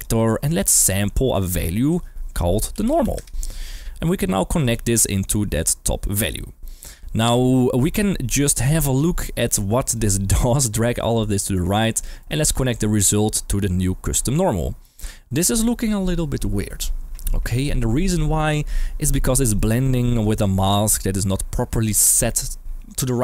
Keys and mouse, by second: 1.4-1.9 drag, 4.6 click, 5.2-6.2 drag, 7.6 shift+middle click, 8.2 middle click, 9.2 middle click, 9.9-10.4 drag, 11.4 g, 11.9 click, 12.2 middle click, 12.5 click, 13.0-14.3 drag, 19.5 middle click, 20.2-20.8 drag, 21.7 middle click.